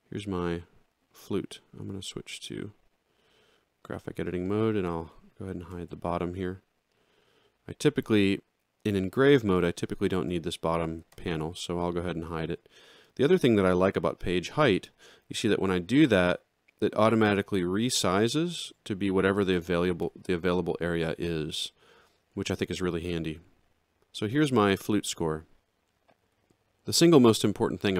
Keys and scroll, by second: 5.7 ctrl+8, 10.2 ctrl+8, 16.1 ctrl+8, 20.0 ctrl+8.